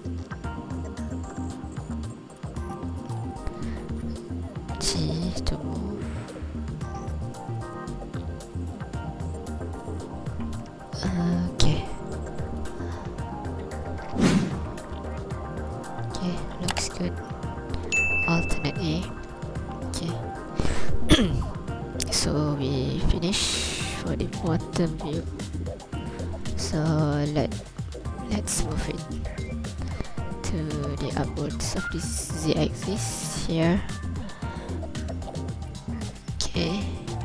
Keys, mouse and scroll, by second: 2.9 click, 4.6 g, 11.6 click, 12.1 scroll down 2, 12.4 ctrl+click, 13.1 scroll up 4, 13.8 scroll down 4, 14.6 scroll up 1, 15.6 scroll up 1, 15.7 ctrl+click, 16.5 scroll down 1, 17.0 ctrl+click, 17.9 alt+a, 18.2-18.6 scroll up 1, 18.8 ctrl+click, 20.5 scroll down 2, 22.6 scroll up 2, 23.5 shift+click, 26.5 right click, 27.7 ctrl+click, 28.6 scroll down 2, 29.0 ctrl+click, 30.2 click, 33.5 scroll down 2, 33.6 KP_3, 33.9 scroll up 1, 34.6 click, 34.6-35.9 scroll up 1, 36.2 n.